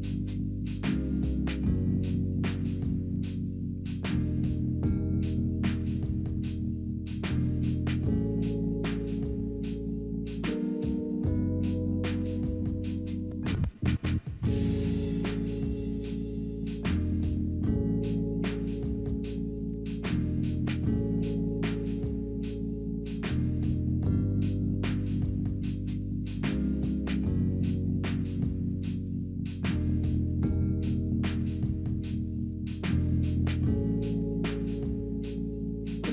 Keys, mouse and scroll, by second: 4.4-9.1 typing, 11.0 ., 11.8 Return, 19.9 5, 20.1 Return, 20.3 3.